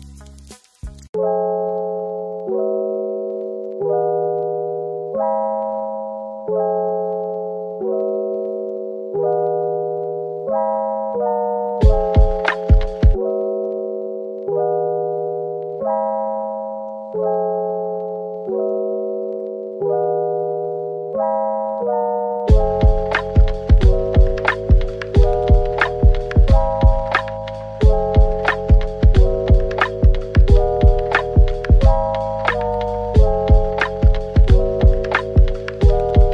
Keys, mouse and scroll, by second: 5.9 typing, 8.0 typing, 12.8 middle click, 15.0 typing, 16.8 typing, 17.8 middle click, 19.8 scroll up 1, 20.6-21.0 typing, 22.3-24.4 typing, 25.3 double click, 25.5 middle click, 26.5-27.2 scroll down 1, 27.5 typing, 28.6 middle click, 29.2-30.1 typing, 33.2 typing, 34.8-35.7 typing, 36.1 middle click.